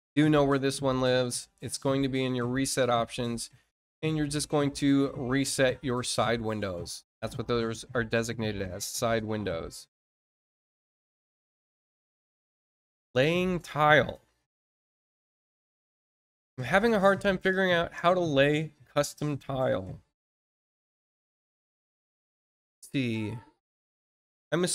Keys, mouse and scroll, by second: 2.1 click, 7.1 click, 12.4 click, 21.4 scroll down 1, 22.7-23.0 scroll down 1.